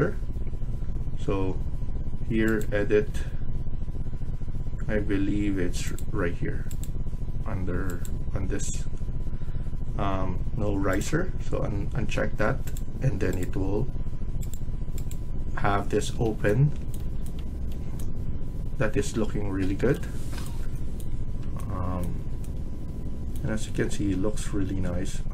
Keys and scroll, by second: 2.9 Escape, 15.9 Escape.